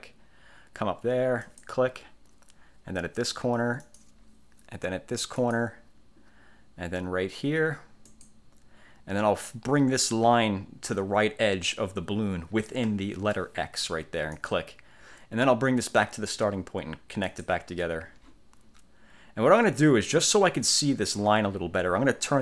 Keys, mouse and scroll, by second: 1.6 click, 3.9 click, 5.5 click, 8.2 click, 14.5 click, 17.4 click.